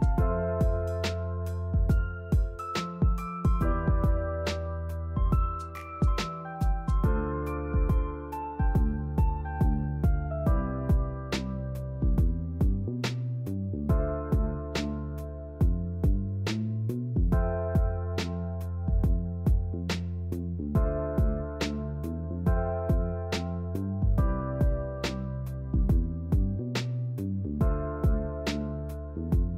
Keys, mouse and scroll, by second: 2.2 e, 7.6 shift+middle click, 7.8-8.2 scroll up 1, 8.2 2, 8.8 shift+middle click, 9.5 ctrl+b, 11.4 alt+click, 11.7 alt+shift+click, 12.0 alt+shift+click, 12.4 ctrl+b, 16.3 scroll down 3, 16.6 shift+middle click, 17.5 click, 17.9 shift+middle click, 18.6 click, 19.2 ctrl+r, 21.8 shift+middle click, 22.0-22.4 scroll up 3, 22.4 click, 22.6 shift+middle click, 23.3 drag, 24.0 g, 25.5 ctrl+r, 27.5 drag, 28.2 g, 29.5 click.